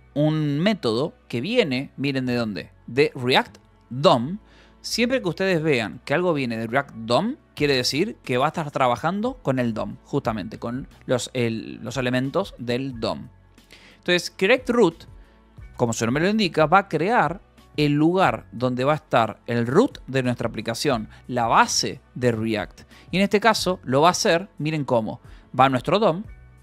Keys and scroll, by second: 1.0 Escape, 1.6 k, 2.5 e, 4.9 v, 5.4 e, 7.5 Escape, 10.8-14.9 typing, 12.0 Escape, 21.3 Escape, 22.8-24.4 typing, 26.2 Escape.